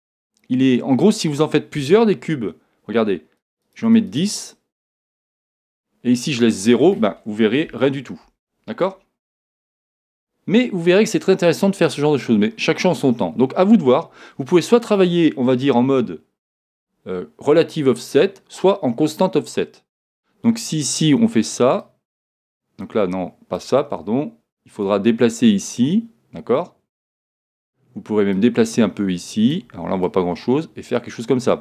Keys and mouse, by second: 3.4-8.6 drag, 9.9-11.8 middle drag, 15.7 KP_1, 21.8 click, 24.8 click, 28.3-31.6 drag.